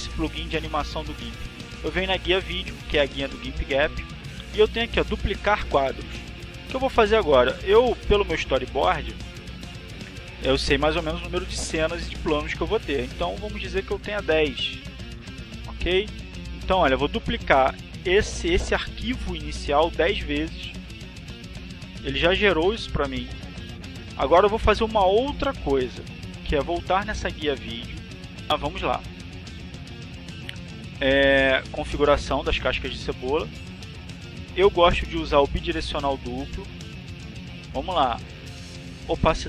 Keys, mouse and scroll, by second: 1.4 click, 7.0 click, 12.4-14.7 drag, 19.8 click, 26.5 click, 30.9 click, 33.0-35.9 drag, 38.1 click.